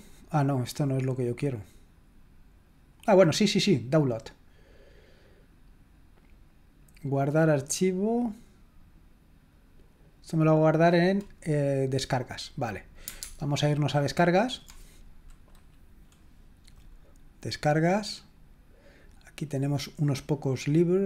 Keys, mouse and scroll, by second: 3.9 click, 10.1 click, 13.4 alt+Tab, 17.6 click.